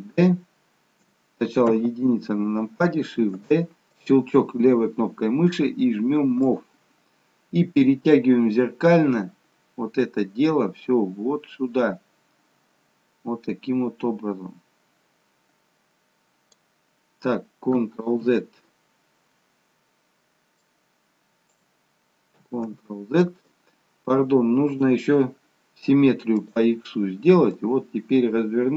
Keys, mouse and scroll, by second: 1.9 KP_1, 3.3 shift+d, 6.6 click, 18.4 ctrl+z, 20.9 click, 22.8 ctrl+z, 24.9 right click, 27.6 click.